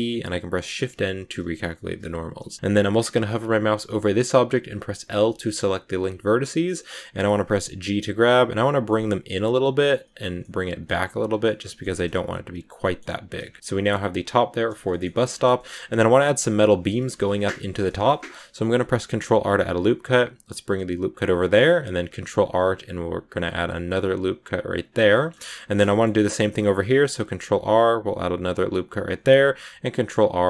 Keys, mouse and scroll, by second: 0.6 shift+n, 1.8 a, 5.3-7.3 middle drag, 7.3 g, 8.8-9.9 middle drag, 9.9 g, 10.3 middle click, 10.8 g, 11.3 scroll up 1, 11.3 middle click, 11.7 g, 12.7 middle click, 13.0 g, 13.3 Tab, 13.3 scroll down 2, 13.5-14.7 middle drag, 14.7-16.3 scroll up 4, 14.8 shift+middle click, 15.5 middle click, 16.3 scroll up 1, 16.3-17.7 middle drag, 17.7-18.7 scroll down 2, 18.7 ctrl+r, 21.1 scroll down 2, 21.3 middle click, 21.5 scroll up 2, 22.0 ctrl+r, 25.0 shift+middle click, 25.2-25.6 scroll up 2, 25.6 scroll down 2, 25.8 shift+middle click, 26.5 ctrl+r, 29.0 ctrl+r.